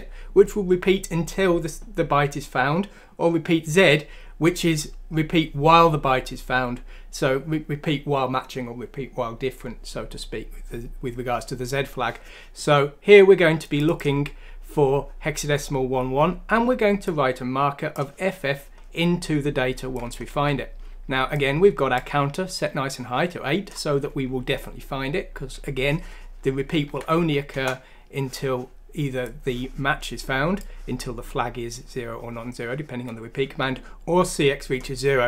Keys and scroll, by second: 26.9 F6, 27.5 Return.